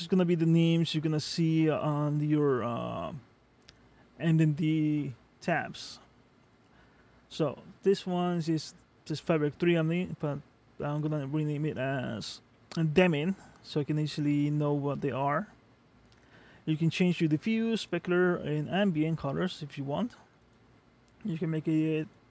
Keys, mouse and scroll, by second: 0.0 click, 1.8 click, 14.1 click, 17.8 click, 20.5 click, 22.0 click.